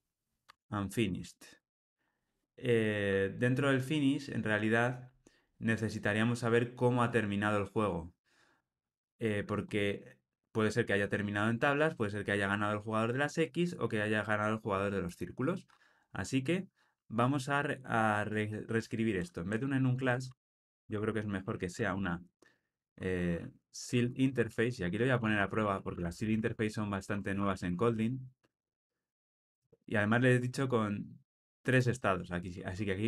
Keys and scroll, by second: 0.4 Tab, 21.4 alt+shift+Left.